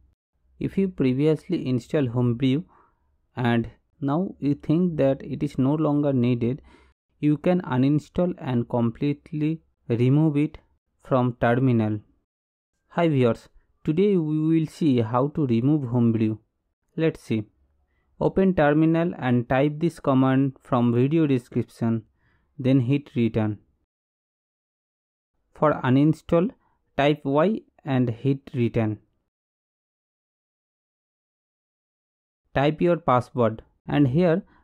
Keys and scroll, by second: 0.2-1.7 typing, 3.1-4.1 typing, 4.6 Return, 7.6 super+=.